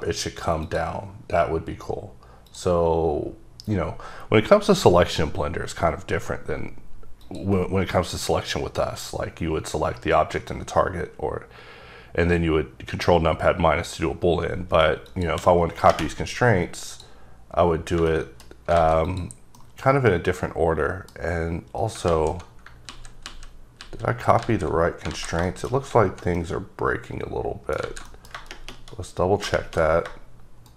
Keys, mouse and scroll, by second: 0.8 click, 1.9 scroll up 3, 2.6 click, 7.3 click, 15.2 shift+click, 17.0 click, 18.2 middle click, 18.9 alt+a, 19.2 click, 19.7 middle click, 21.6-22.0 scroll up 1, 22.2 z, 25.6 middle click, 28.0 z, 28.2 middle click, 29.3 scroll down 2.